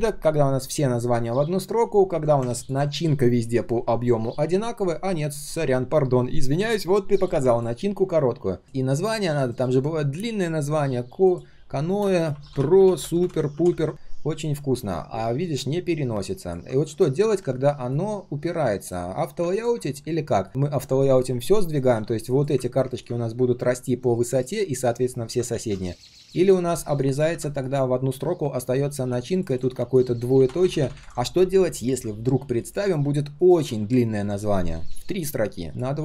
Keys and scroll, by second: 25.5 ctrl+z, 30.4 alt+0, 30.6 alt+1, 30.8 alt+3, 30.9 alt+3.